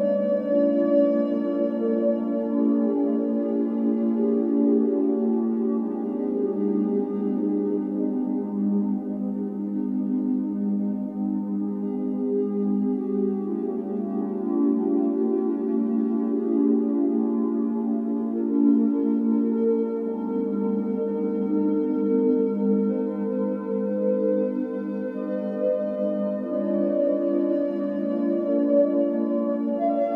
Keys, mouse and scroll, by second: 0.0 scroll up 3, 0.3-0.8 shift+middle drag, 0.8 scroll up 2, 1.1 ctrl+s, 1.9 alt+middle click, 2.6 alt+middle click, 3.3 alt+middle drag, 3.9 alt+middle drag, 4.5-5.0 shift+middle drag, 5.0 click, 6.1 Tab, 6.7 click, 7.1-11.8 typing, 7.3 click, 12.9-13.3 ctrl+z, 13.8 g, 14.5 ctrl+z, 14.9 g, 16.3-20.1 typing, 21.4-30.1 typing, 22.2 click, 22.9 click.